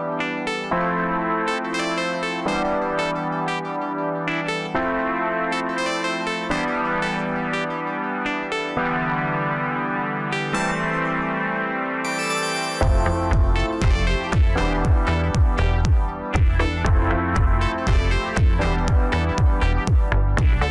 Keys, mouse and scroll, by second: 3.1-3.5 scroll down 2, 3.5 s, 5.5 KP_0, 7.2-7.8 scroll down 2, 7.8-10.8 scroll up 4, 10.8 click, 13.0 KP_0, 15.7 KP_7, 17.0 click, 18.9 click, 20.2 click.